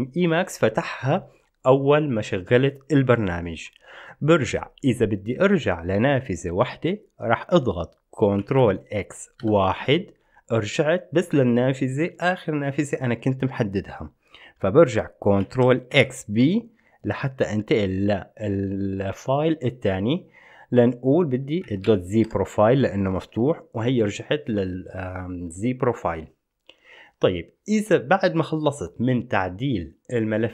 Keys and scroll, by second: 8.6 ctrl+x, 9.6 1, 15.7 ctrl+x, 16.1 b, 21.9-22.9 typing, 23.4 Return.